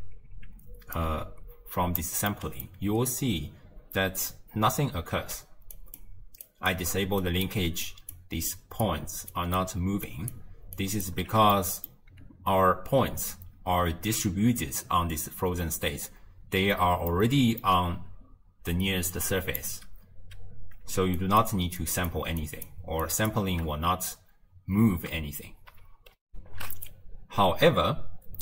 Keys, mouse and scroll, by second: 1.0 click, 2.3-5.4 middle drag, 5.8 ctrl+alt+right click, 6.5 ctrl+alt+right click, 7.3 ctrl+alt+right click, 7.9 ctrl+alt+right click, 8.6 ctrl+alt+right click, 9.3 ctrl+alt+right click, 10.1 ctrl+alt+right click, 10.8 ctrl+alt+right click, 11.6-14.7 middle drag, 17.1-18.7 middle drag, 18.7 d, 19.1-19.6 drag, 19.6 d, 19.7 d, 21.2 ctrl+alt+right click, 21.8 ctrl+alt+right click, 22.4 ctrl+alt+right click, 23.1 ctrl+alt+right click, 26.3 ctrl+alt+shift+w, 26.4 ctrl+alt+shift+q.